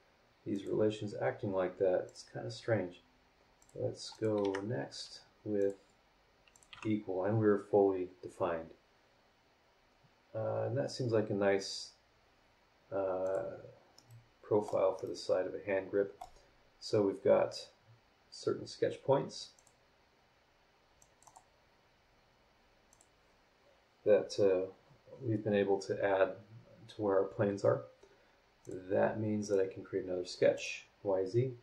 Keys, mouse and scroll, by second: 0.5 click, 2.1 click, 3.6 click, 4.1 click, 4.4 Escape, 5.6 click, 6.5 click, 6.7 e, 7.4 scroll down 2, 13.2 click, 13.9 middle click, 15.0-16.4 middle drag, 19.5 click, 21.0 click, 22.9 click, 28.6 click, 29.4 click, 30.5 click.